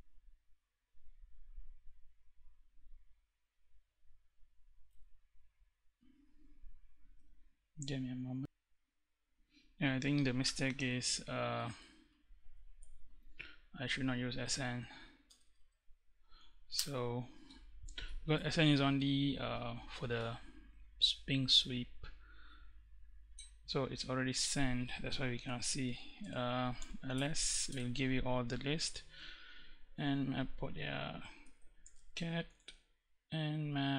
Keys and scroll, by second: 3.0 Left, 9.9 Left, 14.6 BackSpace, 17.2 Return, 24.6-27.3 typing, 30.5-31.9 typing, 32.9 Tab.